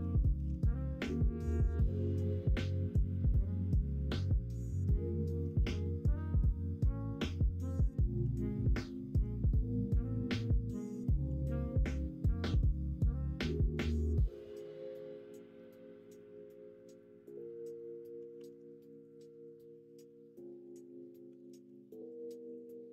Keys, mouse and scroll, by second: 0.3 ctrl+b, 5.5 ctrl+z, 11.3 ctrl+b, 16.6 middle click, 17.4 middle click, 18.3 ctrl+r, 19.9 l, 21.3 s, 22.4-22.9 ctrl+drag.